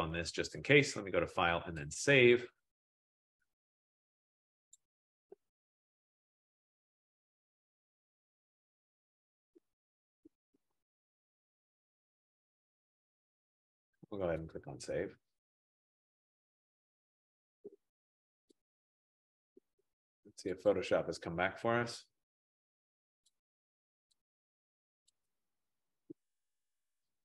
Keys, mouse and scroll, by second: 0.6 click, 2.1 click, 4.9 click, 7.9 click, 8.9 click, 9.5 click, 10.8 -, 11.8-12.9 typing, 14.8 click, 18.8 click, 20.9 click, 24.2 click, 25.4 click, 26.1 click.